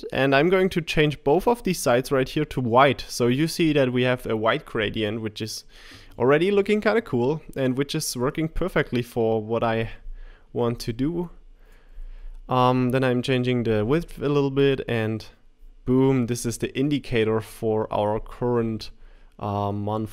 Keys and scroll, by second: 14.6 Left.